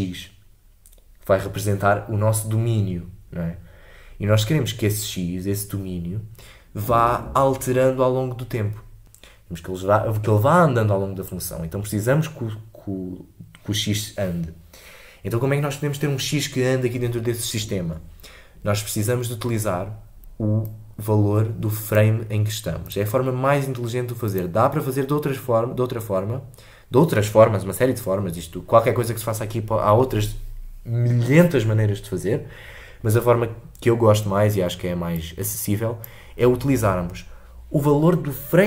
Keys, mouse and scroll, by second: 21.0-38.6 drag.